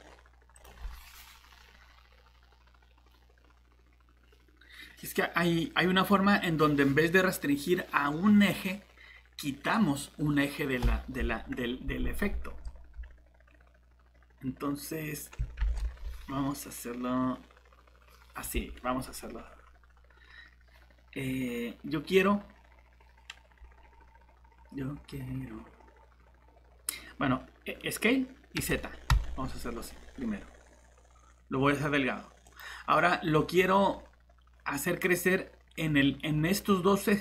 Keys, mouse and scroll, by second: 15.6 ctrl+z, 28.6 s, 29.1 z, 32.9 middle click.